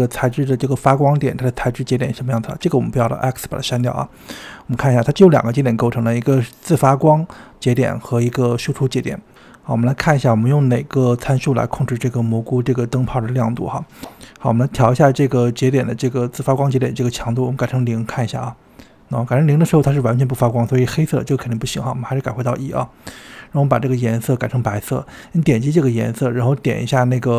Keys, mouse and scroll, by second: 0.0 n, 0.9-1.5 scroll up 3, 1.7 click, 2.1 click, 2.6 x, 3.4-4.8 scroll up 10, 4.8-6.6 shift+middle drag, 6.6 click, 9.7-10.8 scroll down 6, 12.5-13.7 drag, 15.6 click, 16.8 click, 20.4-22.3 drag, 26.8 click.